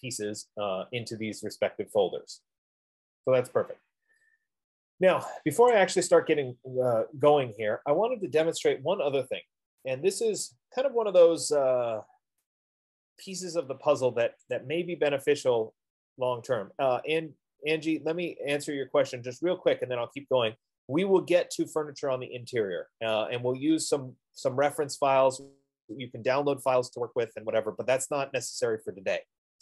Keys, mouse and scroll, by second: 6.2-11.0 drag.